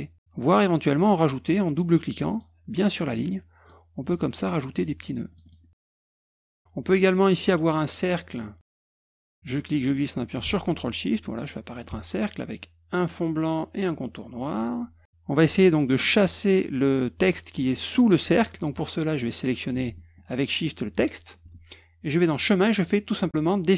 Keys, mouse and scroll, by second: 2.2 click, 2.3 click, 3.3 click, 4.3 click, 4.7 click, 5.3 click, 5.4 click, 5.8 click, 6.0 click, 6.1 click, 6.2 click, 8.6 click, 9.5-11.7 drag, 13.0 click, 14.5 middle click, 20.6 shift+click, 22.2 click.